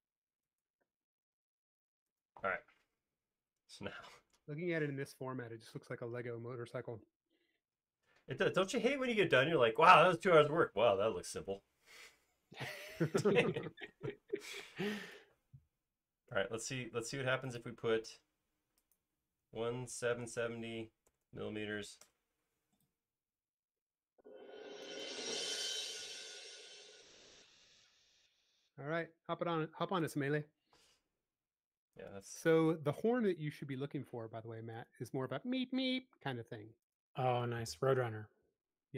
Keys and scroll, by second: 2.7 space, 5.8 super+s, 19.2-21.3 typing, 22.1 Return, 27.2 space, 30.7 m, 37.5 e.